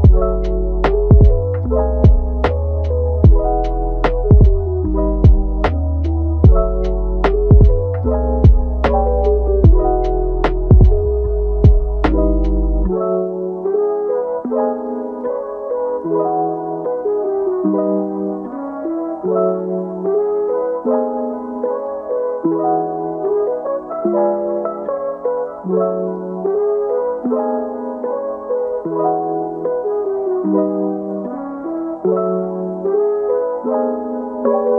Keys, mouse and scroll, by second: 0.3-1.4 middle drag, 1.4 Tab, 2.0 Tab, 2.3 click, 2.7 g, 3.7 Tab, 3.9-5.2 middle drag, 5.2 Tab, 5.6 drag, 6.5 g, 8.1 Tab, 8.3 click, 8.9 middle click, 9.2 Tab, 9.8 shift+d, 10.7 g, 11.6 Tab, 12.6 click, 13.0 g, 14.0 click, 14.3 g, 15.2 click, 15.6 g, 16.6-17.2 middle drag, 17.2 click, 17.8 g, 18.9 click, 19.2 g, 20.3 click, 20.6 g, 23.1 drag, 24.3 click, 24.5 alt+s, 25.5-25.9 middle drag, 25.9 Tab, 26.1 scroll down 1, 26.4-26.9 middle drag, 26.9 Tab, 27.2 click, 27.4 g, 28.1 Tab, 28.3-30.6 middle drag, 30.6 scroll up 2, 30.8-31.2 middle drag, 31.2 Tab, 31.5 Tab, 31.8 click, 32.2-33.1 middle drag, 33.1 shift+d, 34.2 r.